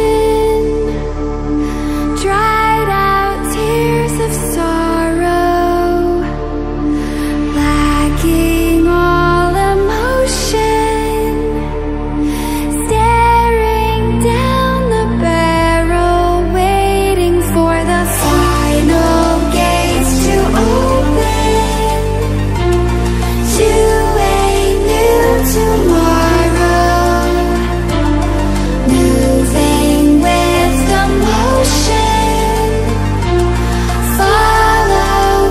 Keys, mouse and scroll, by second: 1.2 scroll up 1, 2.5-3.5 scroll down 1, 3.5-6.0 drag, 6.0 scroll up 1, 6.4-8.2 drag, 8.6 scroll down 1, 10.9 click, 13.2 ctrl+w, 14.4 click, 16.1 ctrl+w, 18.4 click, 19.4 scroll down 1, 24.9-25.2 scroll up 1, 25.8 click, 28.6 click.